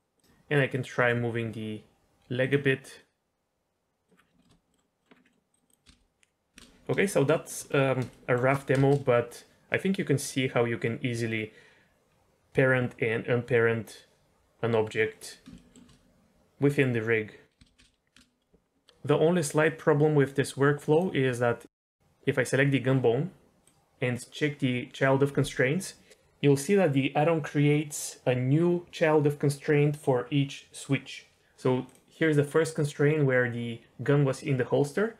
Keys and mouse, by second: 0.2 g, 0.9 g, 2.4 click, 3.0-4.0 drag, 4.4 shift+middle click, 4.7 middle click, 5.3 middle click, 5.5 click, 5.6 click, 5.8 space, 6.6 space, 7.3 shift+middle drag, 8.1 shift+middle drag, 8.7 space, 15.1 middle drag, 15.5 shift+middle drag, 15.6 shift+click, 17.6 space, 17.8 space, 18.1 space, 23.6 click, 31.8 click.